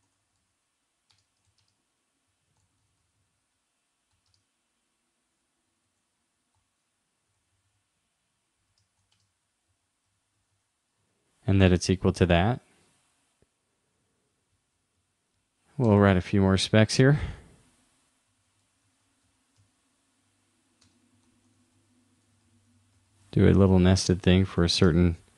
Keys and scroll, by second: 1.5 shift+., 11.0 super+s, 21.3 shift+u, 22.2 shift+c.